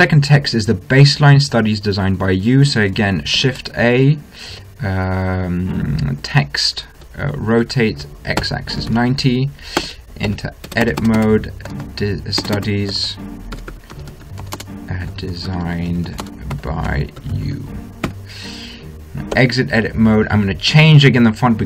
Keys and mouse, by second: 3.8 shift+a, 7.9 r, 10.6 Tab, 11.0-18.5 typing, 19.8 Tab.